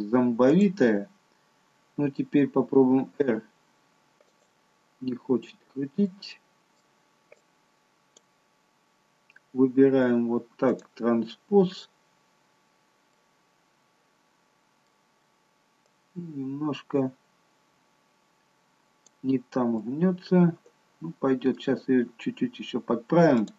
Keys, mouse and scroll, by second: 1.0 click, 2.8 r, 5.8 scroll up 1, 6.1 middle click, 7.4 click, 10.7 click, 13.1 middle click, 15.9 click, 19.8 middle click, 21.8-22.4 scroll down 1, 22.4 scroll down 2, 23.4 click.